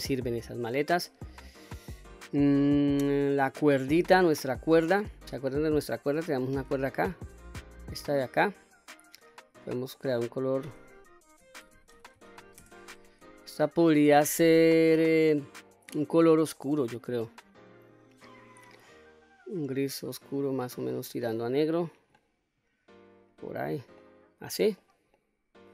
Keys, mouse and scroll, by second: 0.1 scroll down 1, 0.5-1.1 scroll up 1, 1.1 middle click, 1.7-2.9 scroll up 2, 3.0 shift+middle click, 4.0 middle click, 6.2 Tab, 7.7 click, 9.4 click, 10.3-13.7 drag, 16.5 click, 22.7 click, 23.7-24.1 scroll down 1, 24.1-24.8 middle drag, 25.2 middle click.